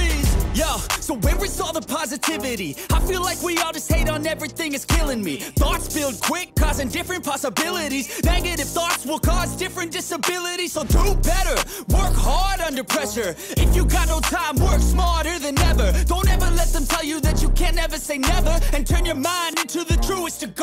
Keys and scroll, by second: 0.2 ctrl+=, 2.7 ctrl+=, 5.3 ctrl+z, 5.4 ctrl+=, 5.7 space, 6.0 ctrl+z, 6.4 ctrl+=, 6.5 space, 6.8 space, 7.2 ctrl+=, 7.7 ctrl+-, 8.1 ctrl+=, 8.4 ctrl+=, 10.2 ctrl+=, 10.3 space, 15.6 ctrl+z, 16.2 ctrl+z, 17.3 ctrl+z, 17.6 ctrl+z, 18.1 ctrl+z, 19.0 ctrl+=.